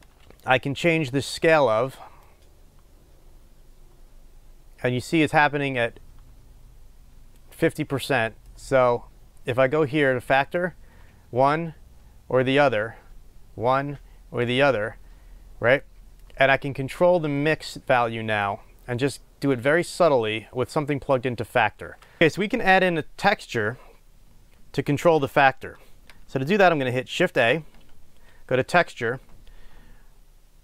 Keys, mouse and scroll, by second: 2.4-10.6 drag, 16.2 click, 16.4 click, 17.6-19.8 drag, 22.2 Delete.